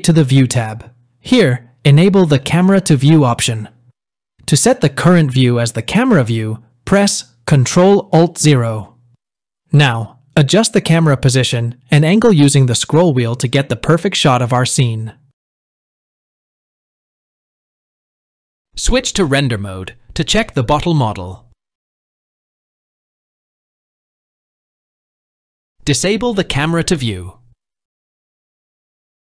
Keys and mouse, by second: 0.0 click, 4.8 n, 9.8 ctrl+alt+KP_0, 12.2-13.6 middle drag, 14.9-16.3 middle drag, 16.6-17.4 shift+middle drag, 19.0 click, 22.4 click, 25.0 n, 27.1 click, 28.7 n.